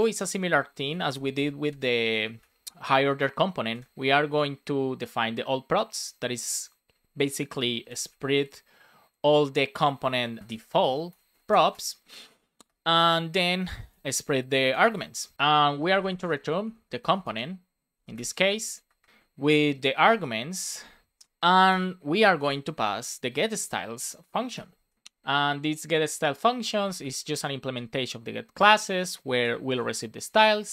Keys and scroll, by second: 0.7 shift+p, 1.3 space, 1.9 BackSpace, 3.2-6.8 typing, 9.7 Return, 10.4 Return, 11.3 shift+p, 12.2 space, 12.6 BackSpace, 12.9 space, 13.9 space, 15.3 Right, 15.3 Return, 16.1 space, 16.5 shift+/, 16.9 shift+c, 18.2 space, 18.5 BackSpace, 19.0 space, 19.2 shift+[, 21.1 space, 22.2 shift+s, 24.7 shift+[, 27.6 Return, 28.0 shift+9, 30.4 Right.